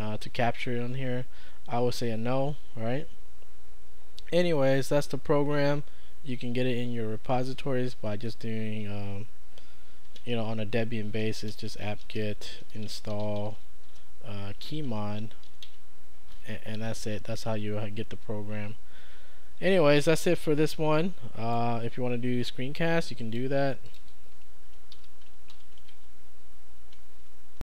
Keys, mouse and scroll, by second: 8.0 Return, 8.2 Return, 9.7-16.1 typing, 21.0-22.0 drag, 23.2 click, 25.0 ctrl+`, 25.9 q, 27.2 ctrl+Page_Up.